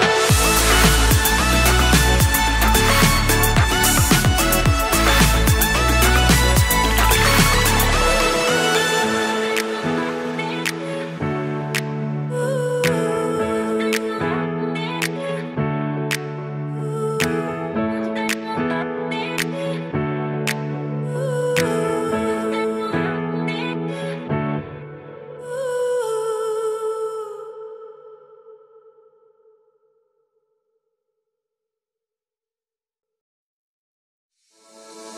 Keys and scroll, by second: 9.1 super+s, 14.2 super+z, 14.4 super+z, 14.7 super+s, 20.1 super+Left, 20.9 shift+super+Right, 21.0 super+/, 21.4 super+s, 28.2 super+x, 28.8 super+Down, 29.3 super+z, 30.4 super+Left, 30.6 super+/, 31.0 super+/, 31.1 super+s.